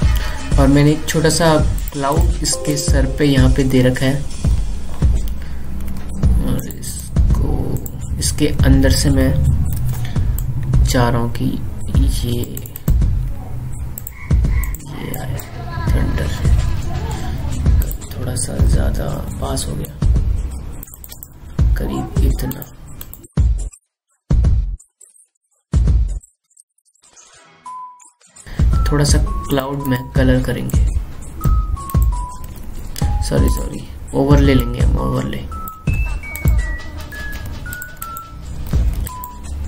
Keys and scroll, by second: 10.7 ctrl+t, 20.0 ctrl+t, 24.6 ctrl+t, 24.9 ctrl+t, 25.5 ctrl+z, 25.8 ctrl+t, 28.2 ctrl+z, 33.8 ctrl+z, 38.3 ctrl+z.